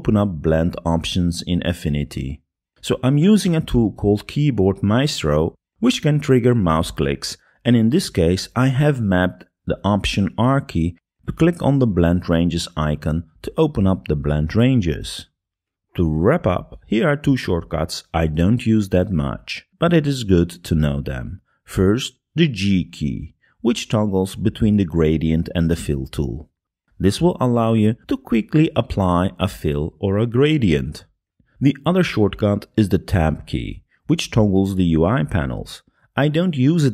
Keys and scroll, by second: 7.8 alt+r, 24.6 g, 27.1 g, 35.2 Tab.